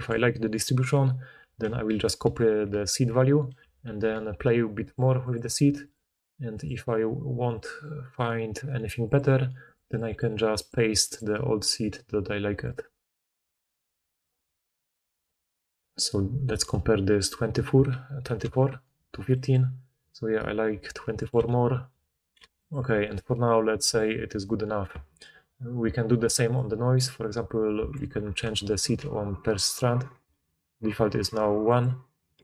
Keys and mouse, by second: 3.5 ctrl+c, 3.8 ctrl+c, 6.9-14.2 middle drag, 18.5 ctrl+v, 22.6 middle click, 22.7-26.5 right drag, 26.5-28.3 middle drag, 28.3 ctrl+right click, 28.7 ctrl+c, 28.7-31.6 ctrl+drag, 31.6-32.4 middle drag.